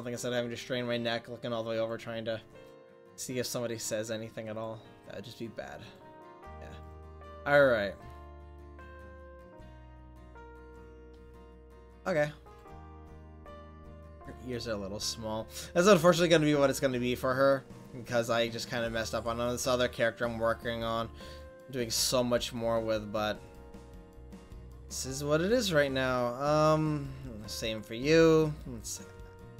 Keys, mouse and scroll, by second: 13.2-14.3 middle drag, 14.3-16.3 drag, 23.6-29.5 right drag.